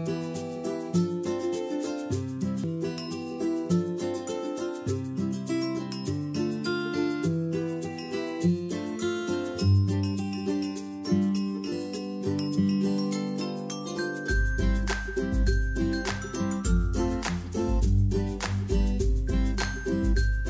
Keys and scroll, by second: 9.5 space, 19.2 space.